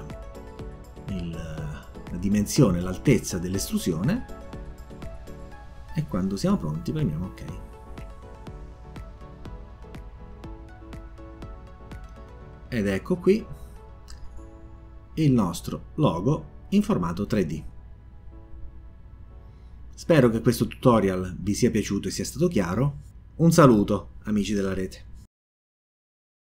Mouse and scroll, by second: 0.7-3.2 drag, 8.2 click, 11.9 click, 13.2 click, 14.4-17.3 drag, 18.7 scroll up 1, 18.9-26.1 scroll down 1, 26.1-26.5 scroll down 1.